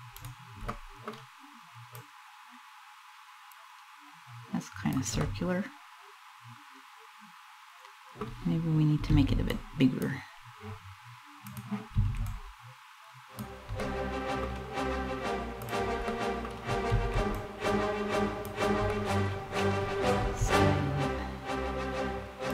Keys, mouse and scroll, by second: 0.4 middle click, 0.8 scroll down 1, 1.6 click, 4.9 middle click, 8.8 b, 11.1 click, 11.7 b, 13.5 middle click, 15.4 click, 15.8 middle click, 16.6 b, 18.6 middle click, 19.8 s, 22.1 click.